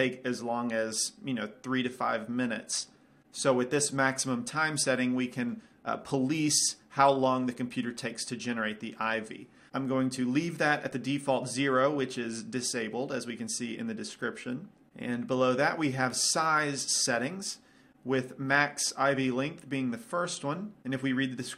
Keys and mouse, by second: 16.6-17.9 drag.